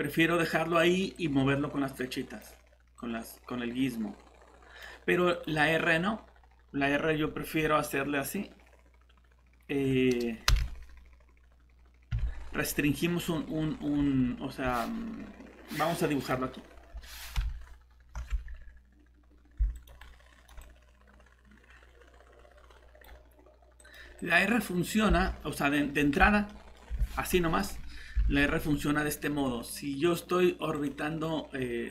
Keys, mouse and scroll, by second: 1.1 click, 10.5 r, 12.1 z, 13.9 Escape, 16.9 scroll down 1, 18.2 typing, 19.8 click, 20.0 right click, 20.1-20.5 typing, 20.6 click, 25.1 alt+Tab, 26.5 middle click, 28.2 alt+Tab, 30.7 click.